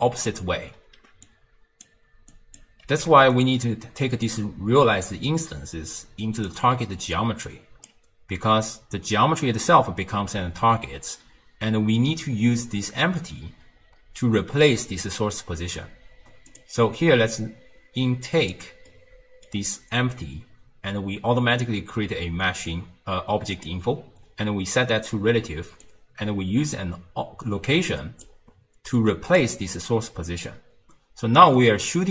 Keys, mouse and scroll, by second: 0.0-0.7 typing, 1.3 click, 2.3 click, 2.9 g, 4.3 click, 7.2 click, 16.5 click, 17.4 click, 18.9-22.0 middle drag, 23.6 click, 25.8 click, 29.0 click, 31.4 d, 31.6 right click.